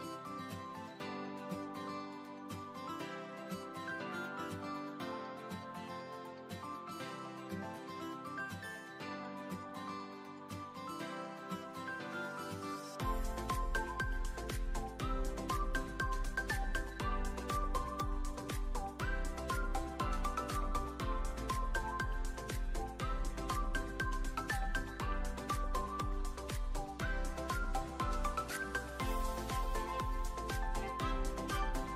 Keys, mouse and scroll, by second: 0.3 ctrl+3, 0.7-1.2 alt+middle drag, 1.7-2.1 shift+middle drag, 3.9 right click, 4.0 click, 6.2 middle click, 8.5-10.4 drag, 12.5-14.0 drag, 15.0-18.4 drag, 19.4 click, 19.8-20.5 alt+middle drag, 21.8 click, 22.6 alt+middle click, 22.9 s, 23.8 click, 24.1 `, 25.0 shift+a, 27.4 click, 28.3-29.7 drag, 30.9 click.